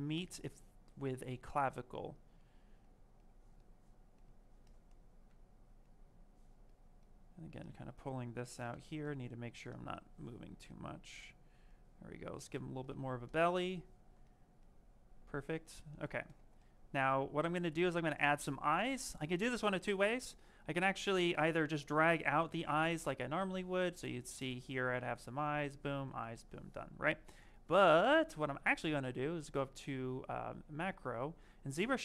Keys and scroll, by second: 5.3 s, 22.2 t, 26.0 ctrl+z.